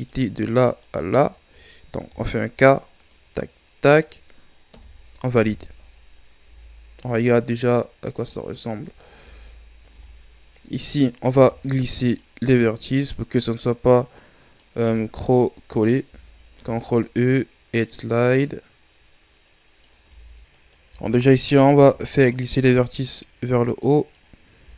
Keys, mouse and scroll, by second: 0.7-2.1 shift+right drag, 2.1 k, 5.5 a, 5.9-6.5 scroll down 5, 6.5 Tab, 6.9-7.6 scroll down 4, 7.6-8.2 scroll down 5, 8.2-9.2 scroll up 12, 9.2 Tab, 9.8 alt+right click, 10.0-11.3 scroll down 3, 11.3 ctrl+e, 15.7 alt+right click, 16.6 ctrl+e, 20.1 Tab, 20.5-21.7 alt+right drag, 21.7 ctrl+e.